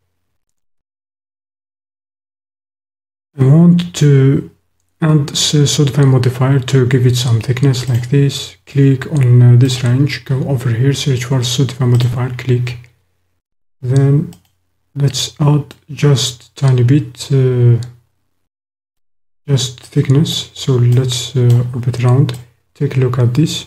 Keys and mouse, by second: 7.8 click, 9.7-10.0 drag, 14.3 click, 15.7-19.0 drag, 19.8 click, 21.0 click, 22.3-23.6 drag.